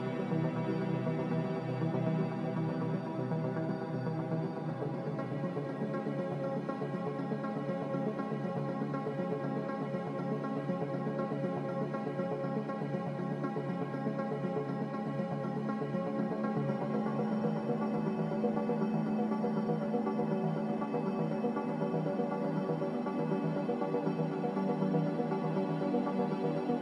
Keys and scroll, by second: 5.6 a, 6.8 a, 7.9 ctrl+c, 8.1 ctrl+v.